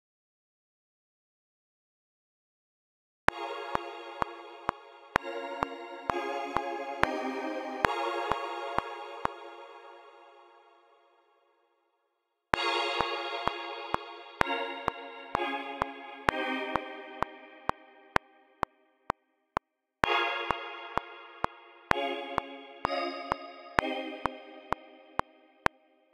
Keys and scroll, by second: 0.1 super+a, 3.2-5.3 typing, 6.7 space, 7.8 space, 9.1 space, 12.5 space, 25.6 typing.